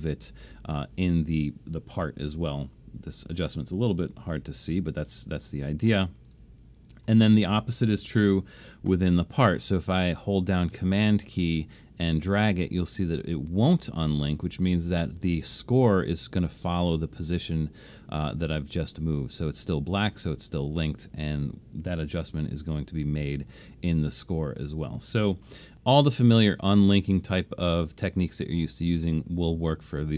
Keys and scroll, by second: 4.7 alt+super+/, 7.1 BackSpace, 8.3 alt+super+/, 22.3 alt+super+/, 25.5 BackSpace.